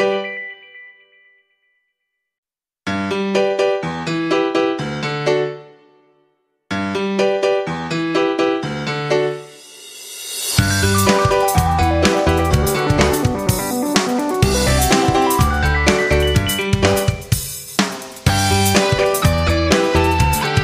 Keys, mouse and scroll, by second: 5.1 F9, 6.0-20.6 drag.